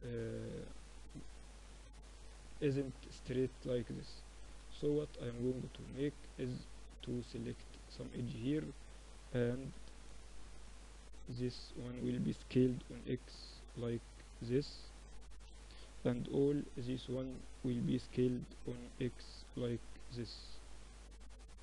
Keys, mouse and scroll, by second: 1.1 KP_7, 2.7 Tab, 2.7-3.7 middle drag, 3.5 Tab, 4.0 Tab, 5.7 ctrl+r, 8.2 z, 8.7 a, 9.7 b, 11.5 s, 14.4 a, 15.3 b, 16.9 s.